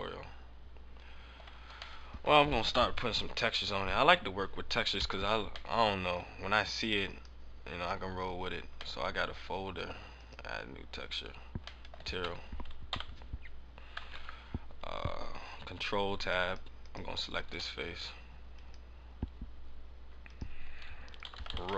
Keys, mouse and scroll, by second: 1.2 middle click, 1.4 Tab, 1.6 scroll down 3, 1.9 middle click, 5.6 middle click, 6.9 click, 7.7 click, 7.7-8.6 scroll up 4, 8.8 scroll up 1, 8.9 middle click, 10.1 click, 11.8 middle click, 11.9 scroll up 1, 12.2 Tab, 12.8 KP_7, 14.6 ctrl+Tab, 16.8 right click, 18.5 click, 18.8 click, 20.2 click.